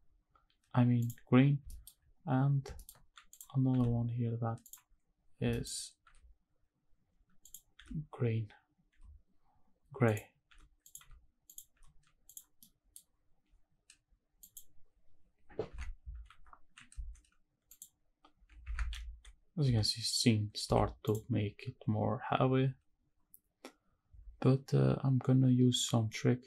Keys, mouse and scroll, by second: 1.0 click, 1.4 scroll down 2, 1.6 shift+middle drag, 2.0-2.5 scroll up 1, 2.5 scroll down 1, 2.8 shift+middle drag, 3.3 click, 3.7 g, 4.6 click, 4.9-6.1 scroll up 6, 5.5 shift+middle drag, 6.1 r, 7.4 click, 7.8 g, 8.9 r, 10.1 click, 10.5 g, 10.8 click, 11.5 click, 11.7 g, 12.3 click, 12.6 middle drag, 13.0-14.8 scroll down 2, 15.4 click, 15.4 scroll down 2, 15.8 shift+`, 18.7 shift+`.